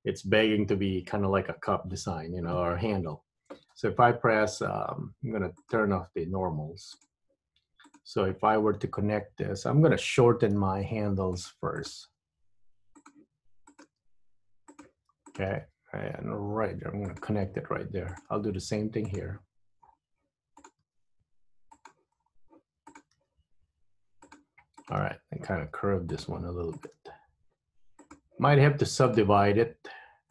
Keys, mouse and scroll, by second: 3.8 Tab, 5.7 click, 8.0 click, 10.7 g, 12.0 click, 12.1 g, 13.8 click, 13.9 g, 15.3 click, 15.7 g, 18.2 click, 18.5 g, 20.0-20.4 scroll down 4, 20.7 click, 21.0 g, 22.3-22.9 scroll up 4, 22.9 click, 23.2 g, 24.9 click, 25.2 g, 26.9 click, 27.0 g, 29.1 click.